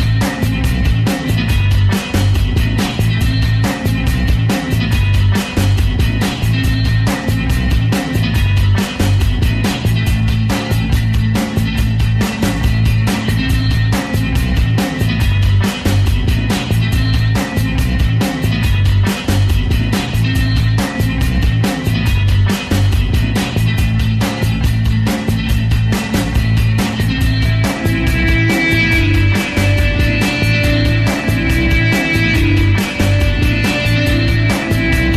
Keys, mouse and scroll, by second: 1.5-2.8 typing, 1.6 click, 2.1 click, 3.0-4.6 drag, 4.6 f, 4.8 f, 5.0-6.1 drag, 6.1 f, 6.3 f, 6.6 click, 7.1 alt+right click, 7.3 alt+click, 7.4 alt+right click, 7.6 alt+middle click, 7.9 alt+click, 8.1 alt+middle click, 8.2 shift+c, 8.3 alt+right click, 8.5 f, 9.0 ctrl+click, 9.6 ctrl+z, 9.7 right click, 10.2 click, 10.3 f, 11.0-12.0 ctrl+drag, 12.2 alt+click, 12.5 ctrl+z, 12.7-14.6 alt+right drag, 14.6 ctrl+click, 15.0 ctrl+z, 15.1 alt+click, 15.3 alt+right click, 15.5 alt+click, 15.9 alt+right click, 16.3 ctrl+click, 17.3 ctrl+z, 17.4 alt+click, 17.5 alt+right click, 17.8-19.3 ctrl+alt+drag, 19.3 alt+right click, 19.4 alt+middle click, 19.5-20.9 alt+drag, 21.1 alt+click, 21.3 alt+middle click, 21.4 alt+click, 21.6 alt+middle click, 21.7-23.2 ctrl+alt+drag, 23.9 alt+click, 24.5 alt+middle click, 25.0 alt+click, 25.4 alt+middle click, 25.5 alt+click, 25.6 alt+middle click, 25.8 alt+click, 25.9 f, 26.2 alt+click, 26.5 alt+right click, 26.6 alt+click, 26.7 f, 27.0 ctrl+click, 27.6 ctrl+z, 27.7 alt+click, 28.0 f, 28.2 ctrl+click, 29.2 alt+middle click, 29.4-33.0 ctrl+drag, 33.0 alt+middle click, 33.1 alt+click, 33.6 f, 33.8 alt+right click, 33.9 alt+middle click, 34.0 alt+click, 34.9 ctrl+z, 35.0 alt+click, 35.1 alt+right click.